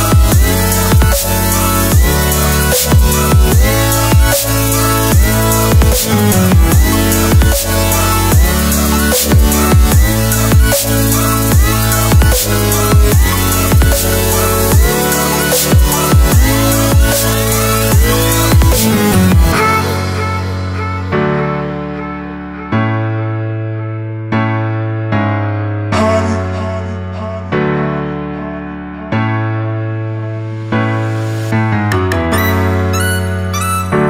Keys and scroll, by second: 8.3 v, 13.8 v, 30.6 shift+super+u.